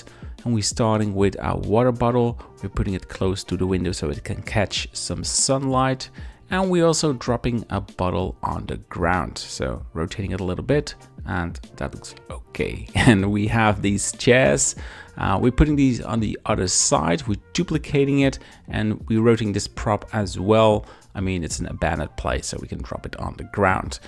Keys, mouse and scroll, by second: 0.3 shift+click, 0.5 middle click, 0.9 KP_Decimal, 1.4 middle click, 1.7 middle click, 2.2-4.6 typing, 2.6 right click, 3.3 click, 3.6 middle click, 4.2 right click, 4.9 click, 5.2 middle click, 5.6 middle click, 5.7 KP_1, 5.7 z, 5.7 shift+d, 6.4 r, 7.3 shift+click, 7.8-10.3 typing, 8.3 shift+click, 8.7 click, 9.2 shift+click, 10.7 shift+middle click, 11.4-12.2 typing, 11.6 click, 14.0 shift+click, 15.5 shift+d, 15.7 shift+click, 15.9 g, 16.1 y, 19.5 click, 19.9 r, 19.9 KP_1, 20.4 r, 21.3 click, 21.6 g, 22.4 click, 22.6 r, 23.7 click, 23.8 g.